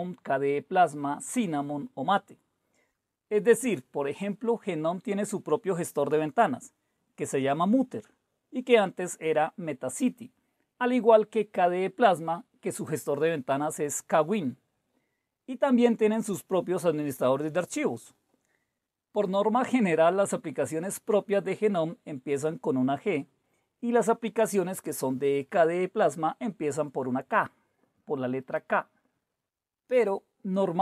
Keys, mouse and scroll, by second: 5.8 typing, 6.6 Return.